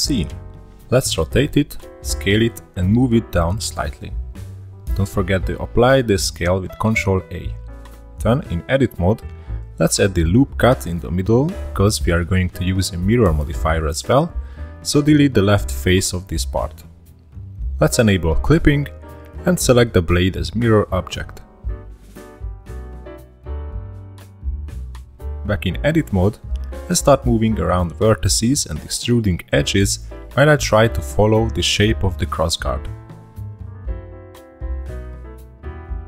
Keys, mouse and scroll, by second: 0.0 r, 1.4 click, 1.9 s, 2.8-3.2 shift+middle drag, 3.2-4.0 drag, 4.0-4.3 scroll up 2, 4.3 ctrl+a, 5.4 Tab, 5.8 1, 6.1 click, 7.2 click, 8.6 2, 8.7 click, 9.1 ctrl+r, 10.2 3, 10.3 click, 10.9 x, 12.9 Tab, 13.5 click, 14.3 click, 15.9 click, 17.5-18.3 drag, 18.3 shift+middle click, 18.4 click, 19.8 click, 21.0 click, 23.1 click, 23.5-23.8 scroll down 3, 23.8-24.8 shift+middle drag, 24.8 click, 26.1 scroll up 1, 26.3-26.7 middle drag, 26.7 e, 28.6 1, 28.7 click, 29.8 click, 30.8 2, 30.8 click, 31.0 middle click, 31.3 e, 32.7 e, 33.5 click, 33.8 1, 33.9 click, 34.1 click, 35.3 2, 35.4 drag, 35.7 e.